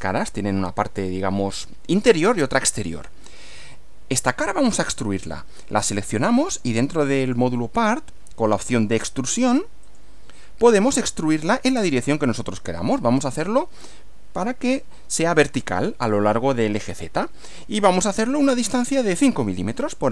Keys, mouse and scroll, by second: 4.9 click, 6.1 click, 7.2 click, 9.9 click, 17.8 click, 18.2-18.9 scroll up 1.